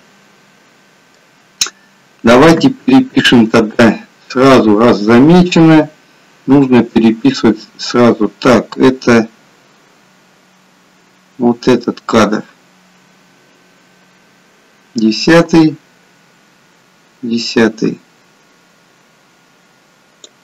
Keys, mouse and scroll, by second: 2.6 KP_3, 5.0 click.